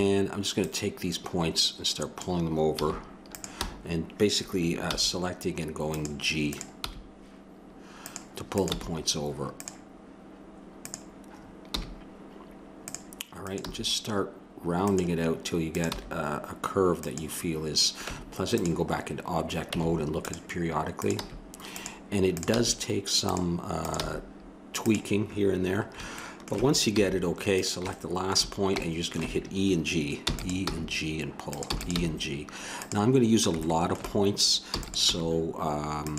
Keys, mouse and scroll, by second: 0.6-2.5 drag, 2.8 a, 3.3-5.0 drag, 4.8 g, 6.5-8.3 drag, 6.8 g, 8.6-10.1 drag, 8.7 g, 11.7 g, 13.6 g, 16.0 g, 18.1 Tab, 19.7 Tab, 21.0-25.6 drag, 21.1 g, 22.5 g, 24.0 g, 26.9 a, 27.5-29.4 drag, 30.2 e, 30.7 g, 31.7 e, 32.0 g, 33.6-34.8 middle drag, 34.7 e, 35.2 g.